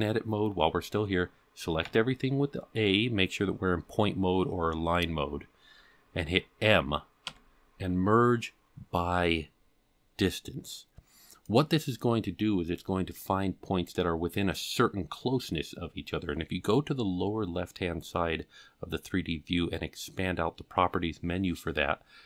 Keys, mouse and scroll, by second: 1.8 a, 7.2 m.